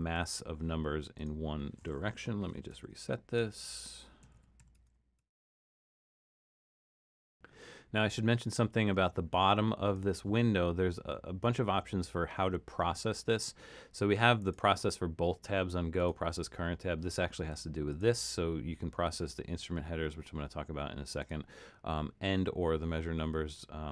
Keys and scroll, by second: 0.1 super+z, 2.2 BackSpace, 2.7 Tab, 3.4 Tab, 4.0-6.2 typing.